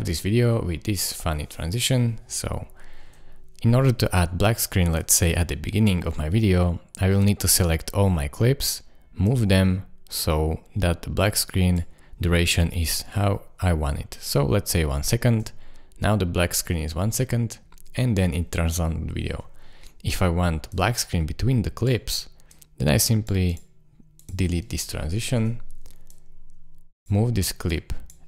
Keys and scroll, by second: 3.0 space, 15.2 space, 19.3 space, 25.4 BackSpace.